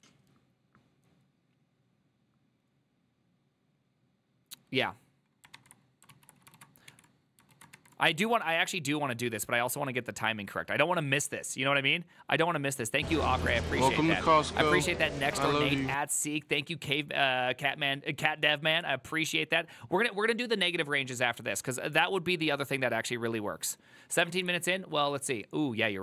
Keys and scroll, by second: 6.2 alt+{, 6.7 ctrl+a, 7.6 ctrl+a, 7.9 1, 8.4 ctrl+a, 8.5 ctrl+a, 13.6 alt++.